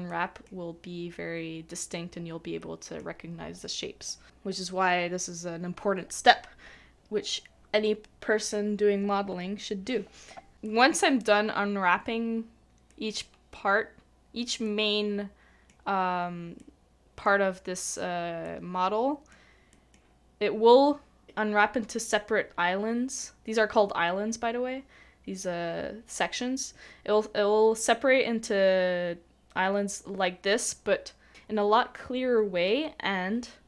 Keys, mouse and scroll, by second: 0.9 scroll down 1, 1.2-1.7 scroll up 1, 1.7 middle click, 10.6 middle click, 12.9 middle click.